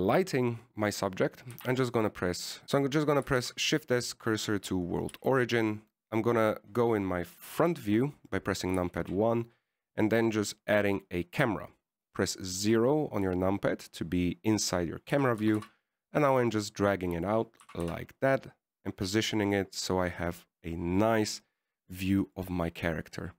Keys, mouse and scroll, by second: 2.6 shift+s, 3.6 shift+s, 4.6 shift+s, 6.5 shift+a, 8.8 KP_1, 10.2 shift+a, 13.8 KP_0, 15.0-16.4 scroll down 2, 16.4 g, 18.9 g, 20.9-21.9 scroll up 5.